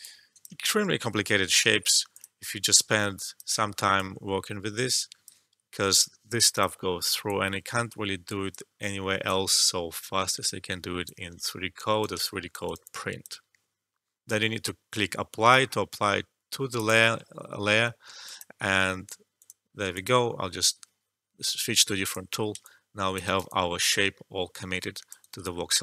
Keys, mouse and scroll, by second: 0.9 e, 2.0-5.7 drag, 5.7 e, 6.5-10.4 drag, 10.4 alt+click, 11.4 alt+middle click, 11.7 alt+right click, 12.3 alt+click, 12.6 alt+right click, 12.8-15.8 alt+drag, 16.7 click, 18.2 alt+click, 19.9 alt+click, 21.0 scroll up 1, 22.0 click, 22.6 alt+click, 23.2 alt+right click, 23.4-25.2 alt+drag, 25.2 alt+right click, 25.4 alt+click.